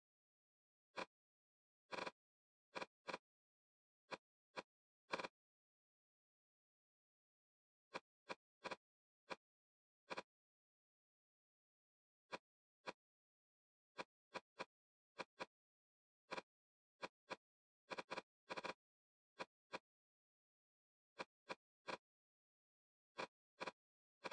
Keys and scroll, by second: 3.5 Return, 6.4-7.2 typing, 7.3 Return, 17.3 shift+e, 20.3 Escape, 21.0 e, 22.6 2.